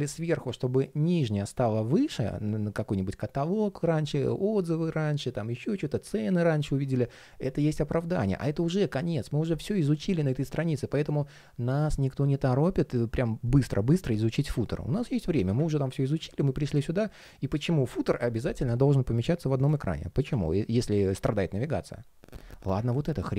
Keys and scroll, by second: 7.8 super+z.